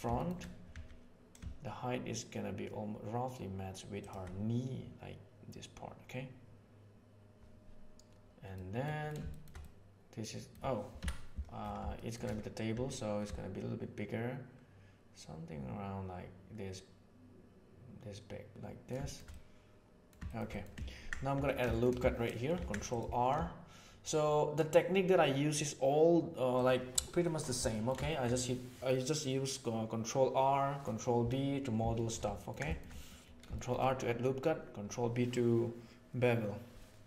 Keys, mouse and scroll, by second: 0.1 shift+middle drag, 0.7 s, 8.5 middle drag, 9.3-10.5 shift+middle drag, 10.9 KP_1, 12.0 middle click, 12.7 s, 18.5-18.9 middle drag, 19.0 shift+middle click, 19.3-20.1 middle drag, 20.2 shift+middle click, 20.5 middle click, 21.3 Tab, 21.7 shift+middle click, 22.5 ctrl+r, 27.7 ctrl+middle click, 28.1 shift+middle click, 31.9 shift+middle click, 32.3 ctrl+middle click, 32.7 shift+middle click, 32.9 middle click, 33.5 shift+middle click.